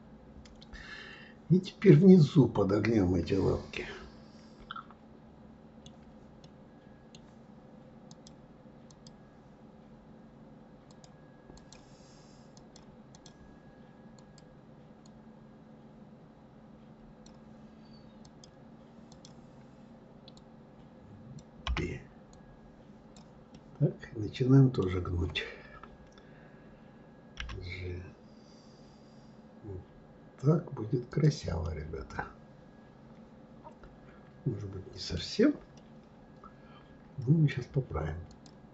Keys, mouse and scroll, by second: 6.4-8.0 middle drag, 8.0-11.0 drag, 11.5 click, 12.5-14.2 drag, 15.0 click, 18.2-21.3 drag, 21.6 b, 23.5-26.5 middle drag, 31.6-34.8 middle drag, 35.7-38.3 middle drag, 38.3 click.